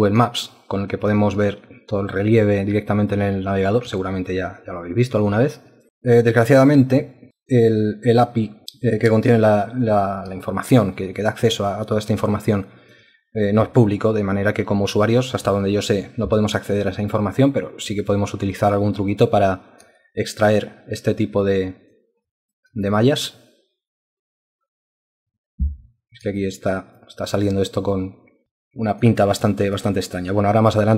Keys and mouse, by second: 0.8 alt+click, 4.1 alt+click, 10.5 alt+click, 12.3 alt+click, 20.1 alt+click, 22.3 alt+click, 26.5 alt+click, 28.5 alt+click, 29.3 alt+click, 29.7 alt+click, 30.2 alt+double click.